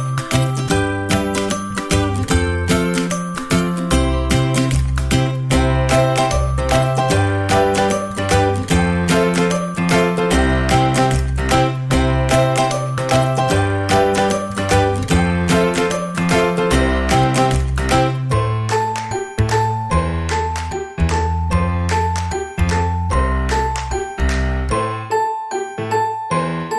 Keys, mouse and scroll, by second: 3.7-6.6 drag, 7.3 a, 10.4 ctrl+Tab, 12.9-15.2 drag, 14.9 ctrl+Tab, 16.8-19.8 drag, 20.1 ctrl+Tab, 22.7-26.3 drag.